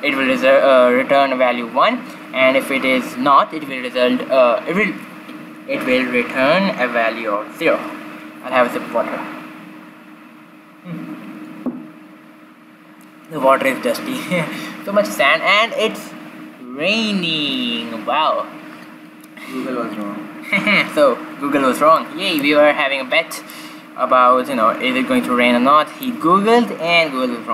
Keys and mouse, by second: 21.9-23.5 middle drag, 23.5-25.4 drag.